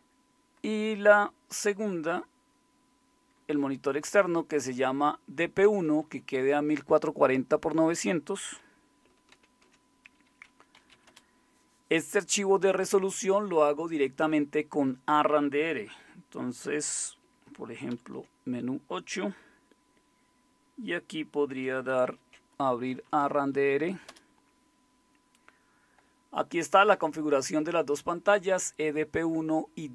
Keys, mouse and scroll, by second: 2.1 Right, 2.1 Left, 2.3 Right, 2.4 Right, 2.5 Right, 2.6 Right, 2.8-3.9 Right, 4.2 Left, 4.9 Left, 5.0 Left, 5.2 Left, 5.6 Left, 5.6 Right, 5.8 Right, 6.0 Right, 6.2 Right, 6.8 Right, 7.0 Right, 7.2 Right, 7.3 Right, 7.5 Right, 9.3 ctrl+x, 10.5-11.4 typing, 17.9 super+8, 22.1 alt+super+d, 22.7-23.7 typing, 24.1 Return.